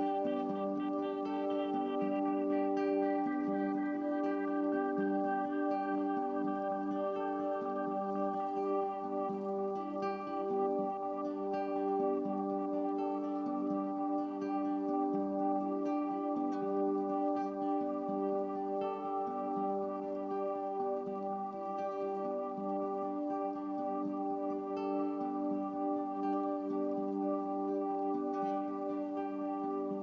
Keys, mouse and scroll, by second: 28.6 click.